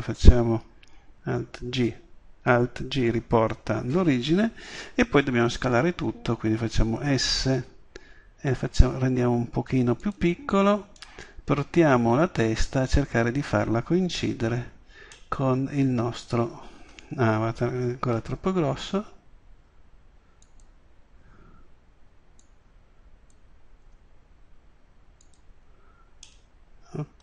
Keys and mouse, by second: 1.3 alt+g, 7.1 s, 10.1 click, 12.4-12.9 drag, 12.9 middle click, 14.3 middle click, 18.3 s, 20.6 click, 23.8 click, 23.8 s, 25.4 click.